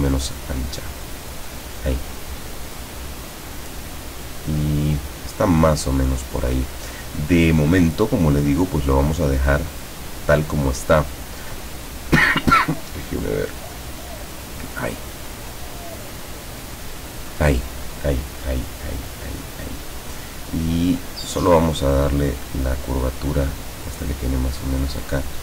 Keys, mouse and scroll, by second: 0.1 click, 1.0-5.0 drag, 9.3-11.5 drag, 12.8 click, 13.2 click, 13.5 click, 14.0 click, 14.6 click, 15.1 click, 15.5 click, 16.0 click, 16.4 click, 21.1-21.7 drag, 22.5-24.9 drag, 25.0 click.